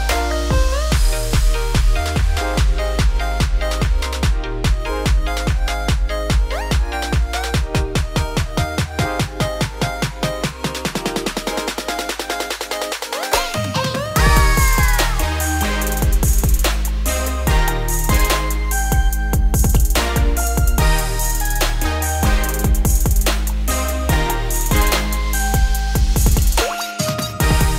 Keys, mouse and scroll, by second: 0.6 ctrl+v, 1.3 ctrl+b, 3.1 Tab, 3.3-3.7 scroll down 9, 3.7-4.2 middle drag, 4.2 scroll up 1, 4.4 q, 9.6 click, 10.6-11.6 scroll down 2, 11.6-12.3 drag, 12.3 scroll down 2, 13.4-14.8 drag, 14.8 middle click, 15.0 scroll up 1, 15.3-16.6 shift+middle drag, 16.6 `, 17.2 scroll down 2, 17.4-17.9 middle drag, 17.9 scroll up 2, 18.6-19.0 shift+middle drag, 19.0-19.6 scroll up 2, 19.6-21.3 shift+middle drag, 21.3-23.2 shift+drag, 23.2-24.1 right drag, 24.1 scroll down 4, 24.3-24.8 middle drag, 24.8-25.5 scroll down 2, 25.5-25.8 middle drag, 25.8-26.8 scroll up 6, 26.2 shift+middle drag, 26.8 click, 27.2 scroll down 1, 27.2-27.7 middle drag.